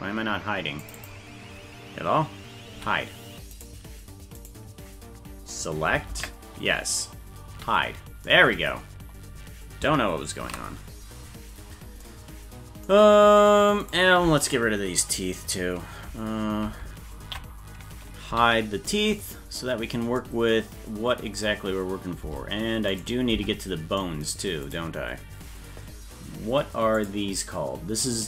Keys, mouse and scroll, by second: 3.6 right click, 4.4 right click, 6.1 ctrl+l, 7.6 h, 9.0 scroll down 4, 10.8 ctrl+s, 11.5 scroll up 3, 13.8 right click, 17.2 ctrl+l, 18.3 h, 22.2 Tab, 22.9 right click, 23.3 Tab, 24.7 right click, 27.0 click.